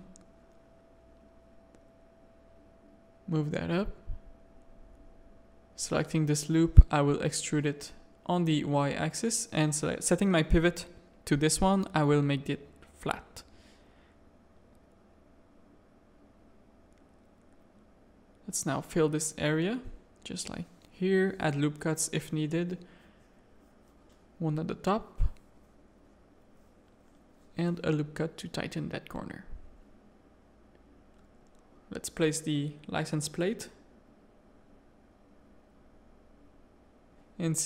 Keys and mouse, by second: 1.2 Tab, 1.6 middle click, 1.9 g, 3.4 alt+a, 4.0 Tab, 4.2 middle click, 5.5 z, 5.9 click, 7.5 e, 9.1 shift+click, 10.9 click, 11.2 middle click, 12.2 s, 13.8 middle click, 14.9 middle click, 15.8 2, 16.6 1, 17.3 middle click, 17.8 2, 18.4 middle click, 19.2 shift+click, 19.5 f, 19.8 a, 20.0 middle click, 20.4 ctrl+r, 22.4 a, 22.8 2, 23.2 click, 23.4 f, 23.6 middle click, 24.0 f, 24.7 Tab, 25.1 z, 25.5 Tab, 25.7 middle click, 26.0 1, 26.6 ctrl+r, 27.8 Tab, 28.1 alt+a, 28.4 click, 28.8 middle click, 30.2-33.4 drag, 33.6 alt+a, 34.0 z, 34.6 middle click, 35.3 z.